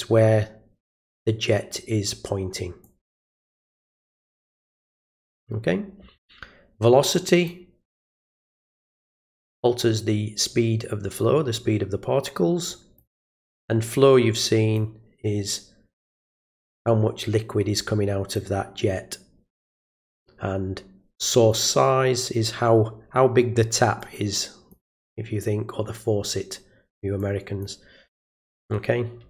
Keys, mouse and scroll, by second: 2.8 click, 4.0 click, 7.1 click, 8.3-8.7 drag, 12.7 click, 14.3 click, 17.8 click, 21.2 click, 24.0-24.7 drag, 27.2 click.